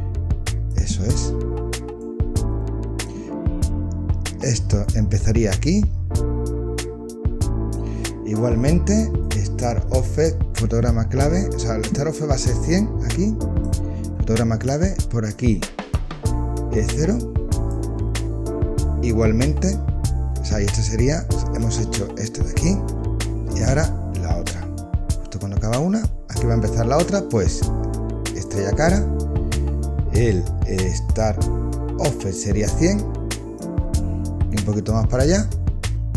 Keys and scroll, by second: 21.7 space, 23.3 space.